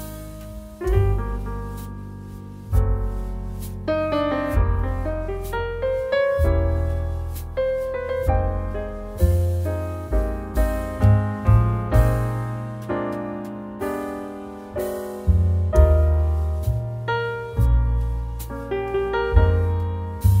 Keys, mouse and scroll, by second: 4.4 space, 11.0 space, 18.6-20.4 drag.